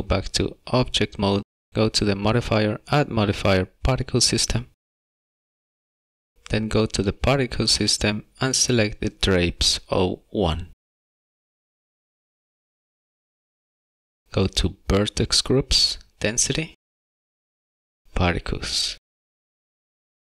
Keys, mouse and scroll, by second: 1.7 click, 2.1 click, 3.0 click, 8.7 click, 10.8 click, 18.0 click.